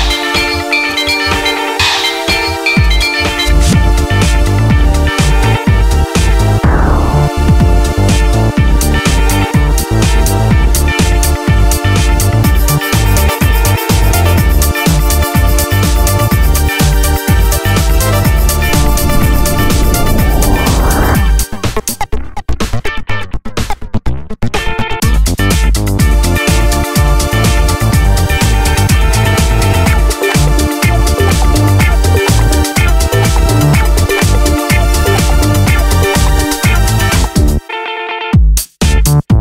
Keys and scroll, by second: 4.1 super+d, 17.0 super+d.